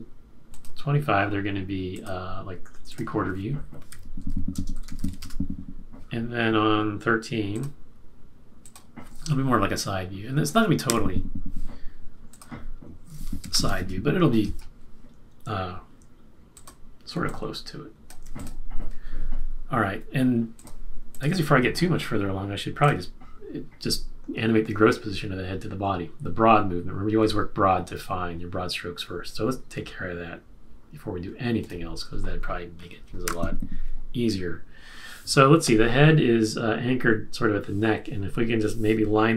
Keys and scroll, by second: 3.6-5.4 typing, 10.8 F6, 13.2-13.9 typing, 33.2 shift+F6.